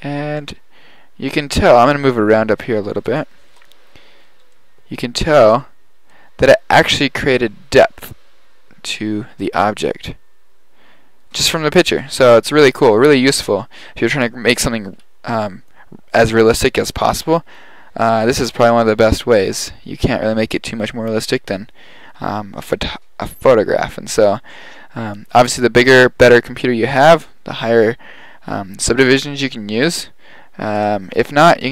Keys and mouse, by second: 0.4 middle click, 1.0 middle click, 2.3 middle click, 5.4-6.5 middle drag, 30.8-31.7 drag.